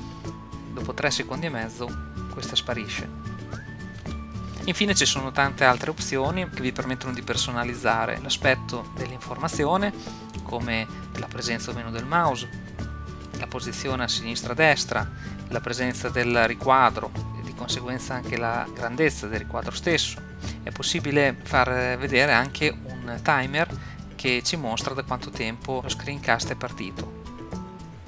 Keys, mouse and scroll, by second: 4.0 n, 10.3-12.2 drag, 15.8-18.8 drag, 22.2-25.8 drag, 23.3 n.